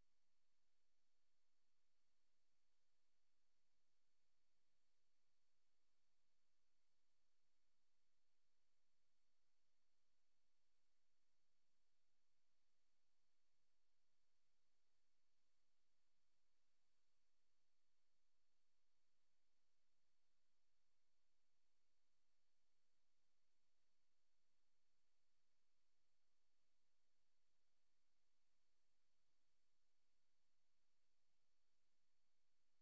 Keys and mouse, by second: 2.5 click, 4.1 Right, 5.2 Right, 6.1 Right, 6.9-11.9 Right, 13.2 Left, 16.1 click, 17.3 Right, 20.3 click, 22.5 click, 23.6 click, 25.3 ctrl+z, 27.8 click, 28.8 click, 30.7 Right, 31.7 click, 32.4 click.